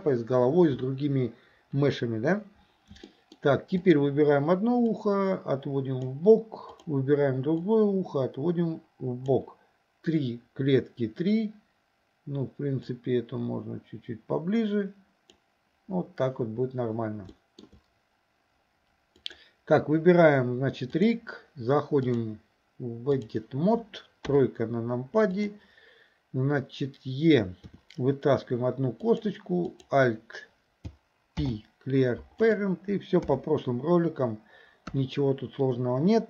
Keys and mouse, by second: 3.2 shift+middle click, 3.8 click, 5.1-6.2 drag, 6.8 click, 7.7-9.4 drag, 12.9 click, 13.2-15.4 drag, 17.4 shift+middle drag, 19.2 click, 21.0 click, 22.2-23.4 drag, 24.3 KP_3, 27.7 e, 29.8 click, 31.4 alt+p, 33.3 KP_7, 34.9 KP_1.